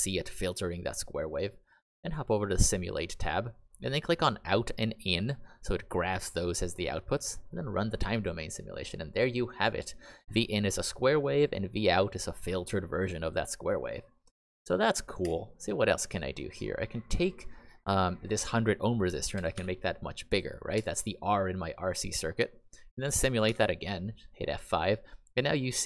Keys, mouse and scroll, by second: 0.0 click, 4.2 click, 5.0 click, 15.2 Escape, 19.1-20.0 typing, 20.7 Escape, 23.4 F5.